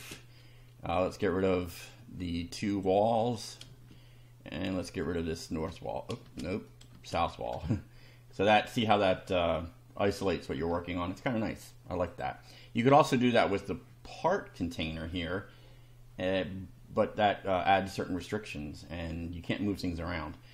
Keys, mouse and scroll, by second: 2.7 click, 3.0 space, 3.4 click, 5.0 click, 5.5 space, 6.7 click, 6.9 space, 8.4 shift+middle click, 10.1 scroll up 2, 10.8-11.3 shift+middle drag, 12.1 click, 17.7-18.4 shift+middle drag, 18.6 shift+scroll down 3.